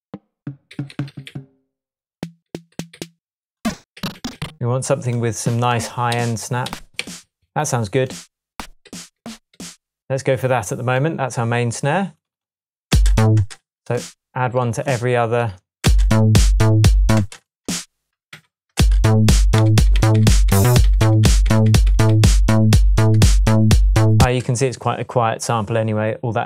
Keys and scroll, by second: 0.7 Down, 1.3 Down, 2.5 Down, 4.0 Down, 6.1 Up, 7.0 Down, 8.5 Up, 8.9 Down, 9.5 Up, 12.9 space, 15.8-22.1 typing, 22.7 Tab, 23.4 Tab, 24.2 space.